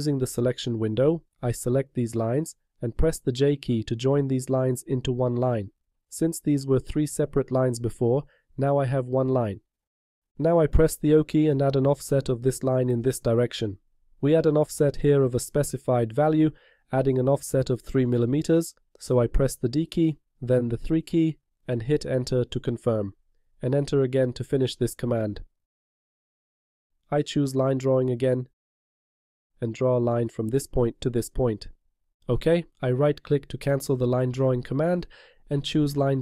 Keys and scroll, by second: 4.9 j, 11.2 o, 19.1 d, 20.9 3, 22.6 Return.